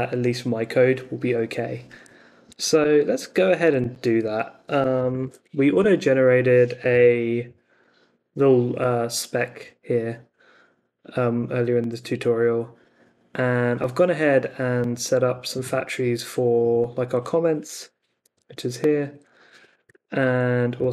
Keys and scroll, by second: 2.5 super+Tab, 4.2 Escape, 4.7-7.4 typing, 17.7 t, 19.9 n, 20.7 Down.